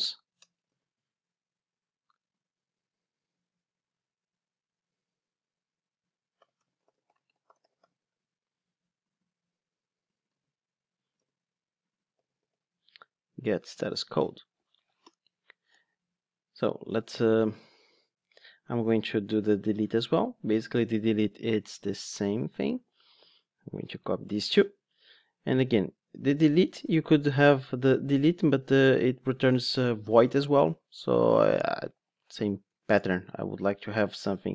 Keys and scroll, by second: 0.7 super+v, 10.3 super+c, 11.1 super+v, 13.7 Return, 23.1 super+c, 24.3 super+v.